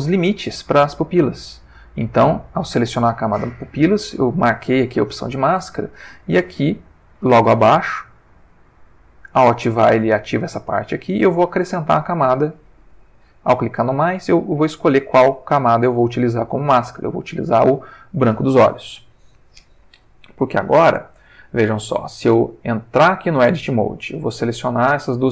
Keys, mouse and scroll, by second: 0.8 click, 8.2 click, 8.7 click, 11.5 click, 17.6 click, 23.4 Tab, 24.2 click, 25.2 shift+click.